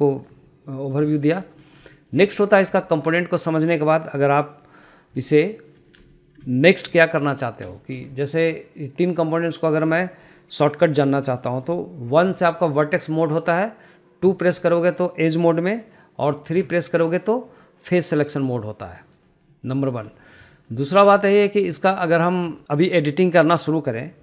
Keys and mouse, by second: 0.9 shift+middle click, 1.6 shift+middle click, 1.9 shift+middle click, 2.4 shift+middle click, 2.7 shift+middle click, 3.3 shift+middle click, 5.7 shift+middle click, 6.1 shift+middle click, 6.6 shift+middle click, 6.9 middle click, 7.5 shift+middle click, 8.3 shift+middle click, 8.6 middle click, 10.5 shift+middle click, 12.7 1, 14.8 2, 17.0 3, 18.9 click, 19.4 middle click, 20.0 middle click, 21.0 shift+middle click, 21.6 shift+middle click, 21.9 shift+middle click, 22.2 shift+middle click, 22.5 shift+middle click.